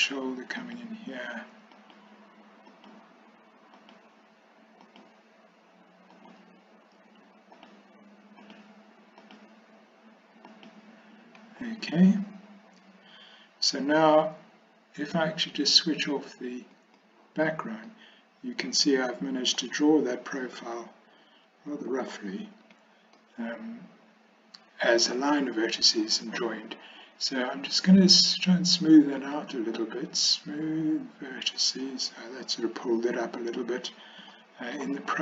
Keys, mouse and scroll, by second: 0.7 ctrl+right click, 1.9 ctrl+right click, 2.7 ctrl+right click, 3.8 ctrl+right click, 6.2 ctrl+right click, 7.6 ctrl+right click, 8.5 ctrl+right click, 10.6 ctrl+right click, 16.8 click, 17.9-19.6 middle drag, 22.7 a, 23.2-25.0 middle drag, 29.4-31.7 drag, 34.4 shift+middle click.